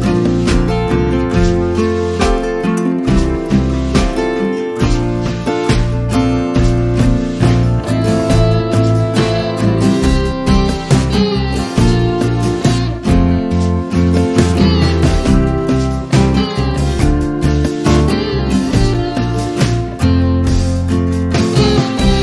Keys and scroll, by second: 1.2 space, 2.6 m, 7.8 space, 9.0 m, 15.9 space, 21.3 m.